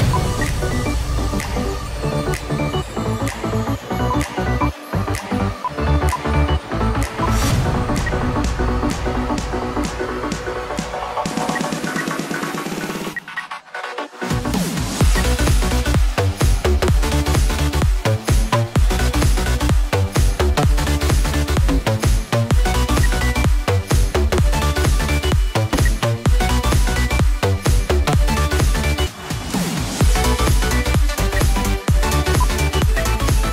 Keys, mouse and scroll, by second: 0.1 shift+F2, 7.8 space, 8.1 scroll down 1, 10.9 double click, 11.8 space, 12.6 double click, 13.3 space, 14.6 double click, 15.0 space, 16.3 right click, 17.9 double click, 18.5 shift+click, 19.5 right click, 20.2-22.7 scroll down 1, 22.8 F2, 23.7-24.9 scroll down 1, 25.1 right click, 26.0 F2, 31.2 space, 31.8 double click, 32.4 shift+click, 32.5-33.2 typing, 33.3 double click.